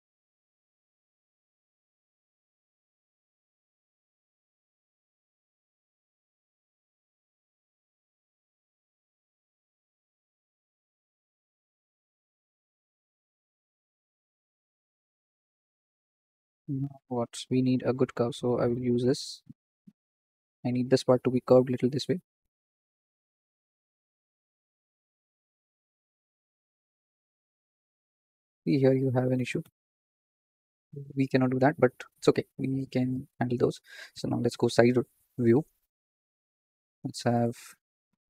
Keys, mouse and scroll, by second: 0.2 KP_7, 0.6 scroll up 3, 0.9 shift+middle click, 1.3 scroll up 2, 2.2 z, 2.7 z, 4.3 s, 7.0 click, 7.9 click, 8.7 s, 12.4 click, 13.3 s, 14.6 click, 18.6-22.3 drag, 22.3 s, 25.0 ctrl+click, 26.0 s, 29.1 ctrl+z, 29.3 ctrl+z, 29.6 ctrl+z, 30.2 click, 34.3 KP_3, 34.7-35.2 scroll down 5, 35.2 shift+middle click, 35.6-36.0 scroll up 5, 36.0 shift+middle click, 36.8 click, 37.6 click, 37.9 click.